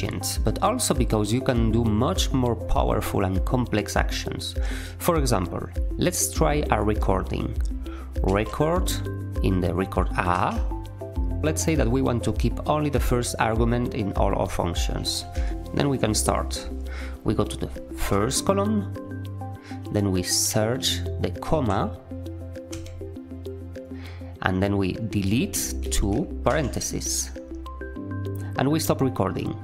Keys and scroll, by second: 8.2 q, 10.2 a, 14.9-15.8 typing, 18.1 typing, 20.5 typing, 21.5 ,, 22.7 Return, 25.2 d, 25.8 t, 26.5 ).